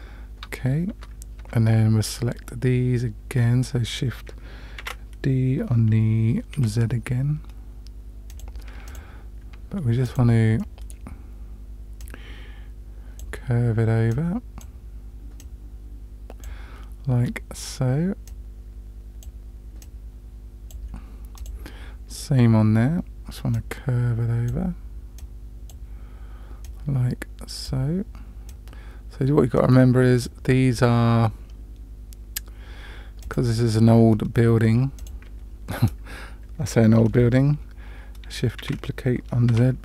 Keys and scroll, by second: 0.9 Tab, 4.8 shift+d, 38.6 shift+d.